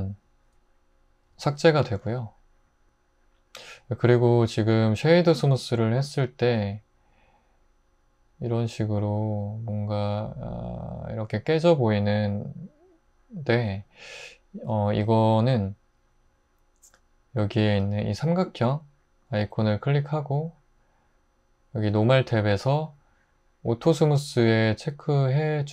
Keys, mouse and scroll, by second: 1.3 x.